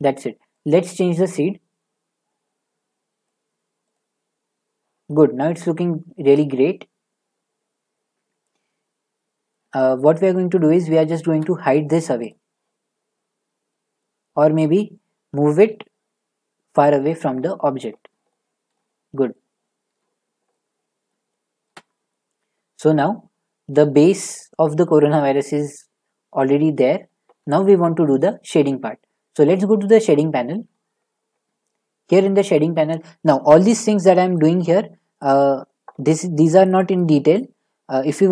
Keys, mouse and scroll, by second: 0.7 typing, 3.3-7.0 drag, 9.5 middle click, 9.6 middle click, 9.7 middle click, 10.6 shift+middle click, 11.3 shift+middle click, 11.5 middle click, 11.6 middle click, 12.2 scroll, 12.3 click, 14.0 middle click, 14.1 middle click, 14.5-15.3 scroll, 15.5 g, 16.8 click, 17.4-18.4 scroll, 18.7 shift+middle click, 19.0-19.8 scroll, 20.0 middle click, 20.0 scroll, 21.1 middle click, 25.8-26.2 scroll, 28.0 shift+middle click, 30.0 click, 31.0 scroll, 31.0-32.1 scroll up 6, 32.1 shift+middle click, 32.1-32.9 scroll up 2, 35.2 click, 36.6 click, 36.7 click.